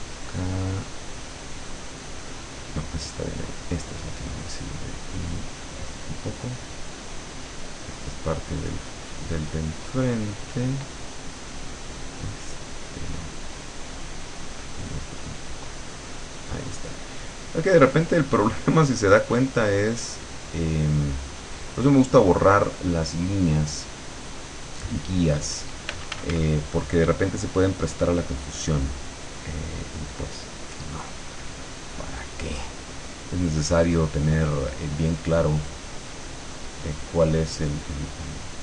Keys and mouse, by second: 3.2-5.0 drag, 5.4 click, 7.4 click, 9.6 click, 11.2-13.4 drag, 14.6-16.9 drag, 17.6-19.1 drag, 20.0 click, 22.0 click, 26.0 f, 26.7-30.6 drag.